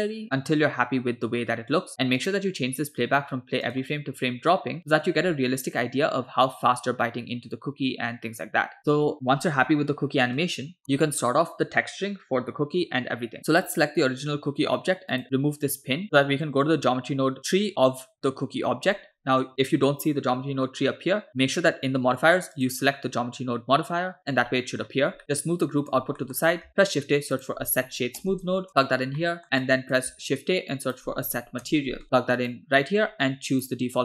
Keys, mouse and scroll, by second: 2.3-3.6 drag, 5.1 space, 8.8 space, 10.4 click, 13.6 click, 15.1 click, 16.0 click, 22.6 click, 24.9-25.2 scroll down 2, 25.2 click, 25.2 middle click, 26.2 middle click, 26.4 scroll up 2, 26.7 shift+a, 29.2 middle click, 29.7 click, 30.2 shift+a, 33.6 click.